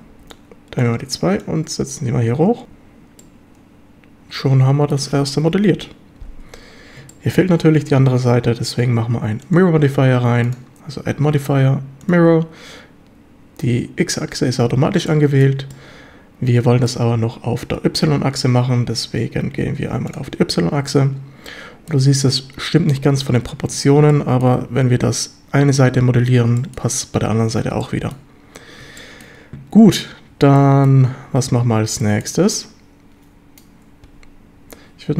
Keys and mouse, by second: 0.1 b, 1.4-2.6 drag, 2.7 z, 3.2-5.0 drag, 4.3 right click, 5.8 KP_7, 7.2 shift+middle click, 10.5-12.1 drag, 15.1-15.5 shift+middle drag, 15.7-16.9 shift+middle drag, 20.1 click, 20.9-22.0 shift+middle drag, 24.2-24.5 shift+middle drag, 26.6 shift+middle drag, 27.8-28.2 shift+middle drag, 29.0 shift+middle drag, 30.6-30.9 shift+middle drag, 32.0 shift+middle drag.